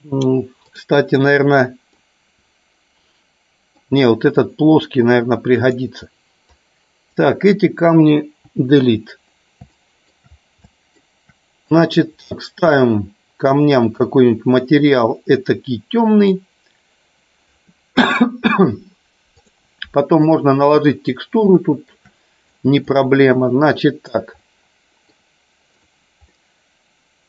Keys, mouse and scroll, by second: 1.9-3.8 middle drag, 4.3-5.6 drag, 6.4 click, 8.4 Delete, 9.6 shift+middle click, 10.5-10.9 shift+middle drag, 11.6 click, 13.8 click, 19.3 click, 21.5-21.9 shift+middle drag, 22.5-22.9 drag, 24.3-25.0 middle drag, 25.8 click, 26.3 middle click.